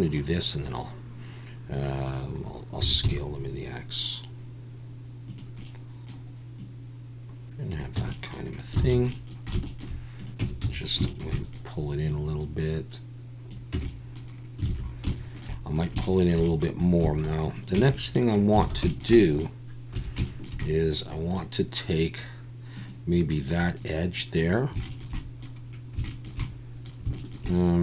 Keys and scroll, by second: 2.8 s, 3.0 x, 7.9 Tab, 8.8 alt+a, 10.4 Tab, 10.6 a, 13.7 Tab, 14.7 alt+a, 17.7 Tab, 18.6 alt+a, 19.9 2.